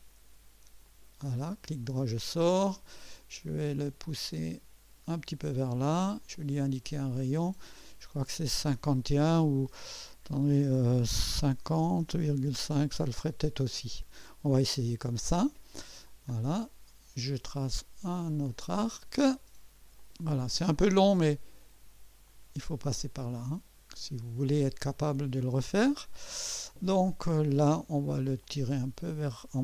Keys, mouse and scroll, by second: 0.8 click, 1.5 right click, 2.0 scroll up 1, 3.7 click, 6.2 click, 7.2 click, 11.7 click, 11.7 5, 12.0 0, 12.2 KP_Decimal, 12.4 KP_5, 12.7 KP_Enter, 12.7 Return, 13.8 scroll up 1, 14.5-15.2 right drag, 14.7 typing, 16.0-16.4 scroll down 1, 16.5 right click, 18.5 click, 20.0 click, 22.3 click, 24.2 click, 25.0 scroll up 1, 25.5 right click, 27.4 right click, 28.4 click.